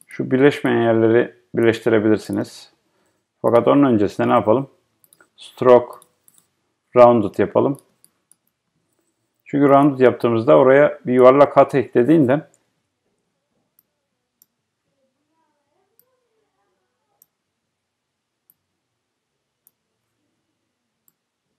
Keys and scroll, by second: 12.7 Right.